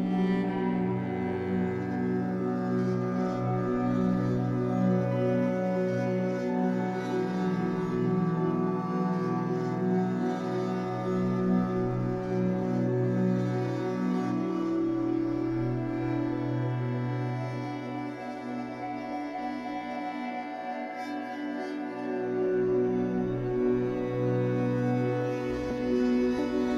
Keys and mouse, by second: 0.4 space, 1.7-4.9 drag, 6.3-7.7 typing, 7.8-8.7 drag, 9.2-17.2 drag, 17.0-17.7 typing, 19.6 click, 20.9-21.6 typing, 21.9-23.0 drag, 23.2-25.2 drag.